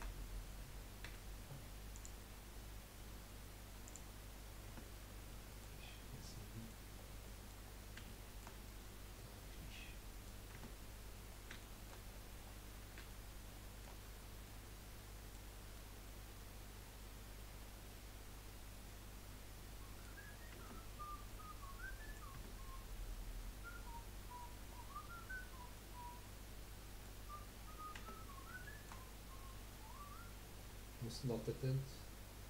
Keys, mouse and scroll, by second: 1.1 F3, 2.3-2.8 scroll down 3, 3.9 click, 4.3-4.7 scroll down 2, 4.7 Tab, 5.3-5.8 middle drag, 5.8-6.2 scroll up 3, 6.2-7.0 middle drag, 7.0 scroll down 5, 7.3 middle click, 7.7-8.1 scroll down 4, 8.1-10.6 shift+middle drag, 10.6 Tab, 11.2 scroll up 2, 11.8 shift+middle click, 12.0-13.2 scroll up 9, 13.2 shift+middle click, 14.0-14.4 scroll up 2, 14.4-18.8 middle drag, 20.3-21.2 scroll down 10, 20.6 Tab, 21.2-22.3 middle drag, 22.3 Tab, 22.7-24.7 scroll up 8, 24.7-25.3 scroll down 3, 25.3-27.2 middle drag, 27.2-27.9 scroll down 7, 27.9 Tab, 28.4 scroll down 3, 28.6-29.2 shift+middle drag, 29.2-31.1 scroll up 5, 31.1 scroll down 3, 31.4-32.4 middle drag.